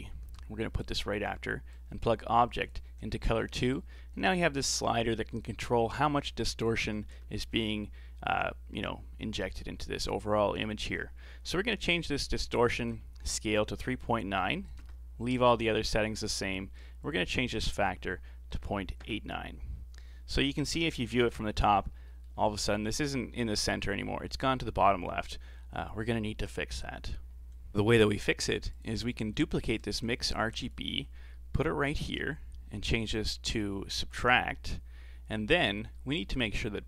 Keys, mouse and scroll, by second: 1.7 click, 3.1-3.5 scroll up 5, 3.5-6.5 middle drag, 12.6-15.7 drag, 17.0-20.0 drag, 20.7 KP_7, 21.6-22.1 scroll up 5, 22.1-22.4 shift+middle drag, 22.4-23.7 scroll up 1, 23.7 scroll down 4, 25.1-27.6 scroll down 2, 28.7 click, 29.1 scroll down 3, 29.3 middle click, 29.9 shift+d, 31.0-31.4 scroll up 4, 31.4-32.1 middle drag, 32.1-35.1 drag, 35.9-36.8 middle drag.